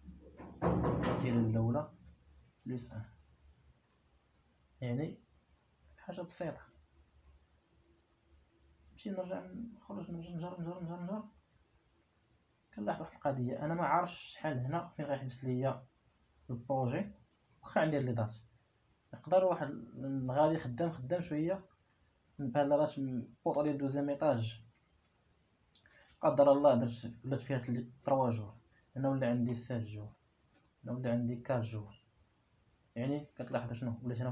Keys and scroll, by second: 2.4 shift+1, 3.3 Return, 27.1 shift+3, 28.0 Return, 29.9 shift+7, 31.0 Return, 32.1 shift+4, 32.6 Return.